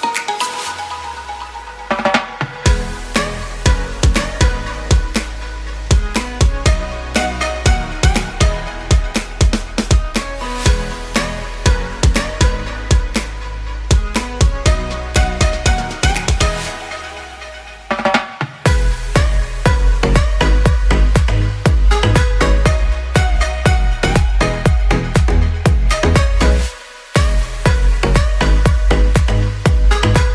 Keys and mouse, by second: 0.4 n, 2.5 click, 2.8 shift+middle click, 3.7 shift+middle click, 4.4 s, 6.4-8.0 shift+middle drag, 8.2 n, 8.5 Tab, 8.9 ctrl+s, 10.0 shift+middle click, 10.6-12.1 middle drag.